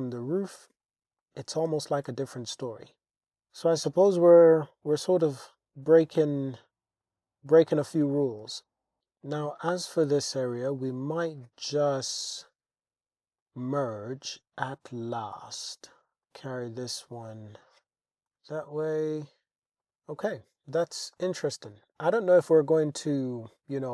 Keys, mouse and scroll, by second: 0.5-0.8 shift+drag, 1.2-1.7 shift+drag, 1.7 Tab, 2.1 alt+z, 3.3 Tab, 4.2 click, 5.2 g, 5.4 g, 7.0 click, 8.4 g, 8.6 g, 9.0 Tab, 9.6 click, 10.6 shift+click, 10.8 shift+click, 11.7 m, 14.9 g, 14.9 y, 16.2 click, 16.9 click, 17.8 Tab, 18.3 Tab, 18.6 click, 19.6 Tab, 19.8 click, 21.1 shift+middle click, 21.7 shift+middle click, 22.7 click, 23.1-23.9 drag.